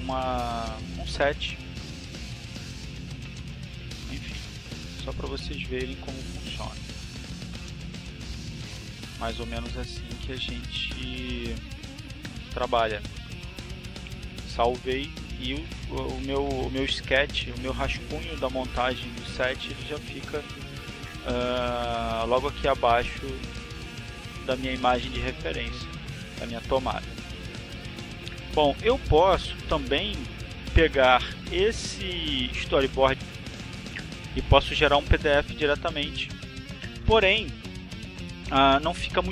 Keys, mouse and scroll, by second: 1.1 click, 1.6 click, 3.5-4.8 drag, 10.6 click, 11.0 click, 12.1 click, 22.8 click, 23.6-25.8 drag, 30.0-31.8 drag.